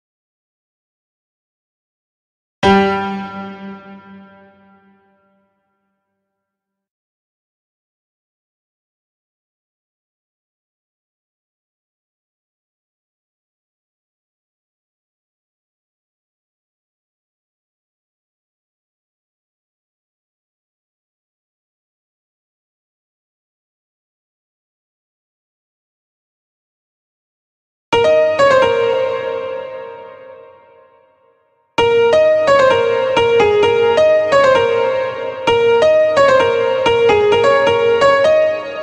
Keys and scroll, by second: 9.6 ctrl+b, 27.3 space, 31.2 space.